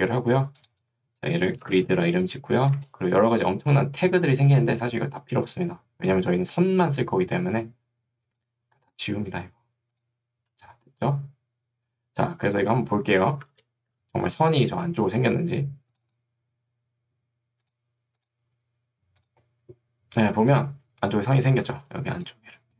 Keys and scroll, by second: 1.7 g, 2.7 Return, 20.5 3, 21.7 ctrl+2.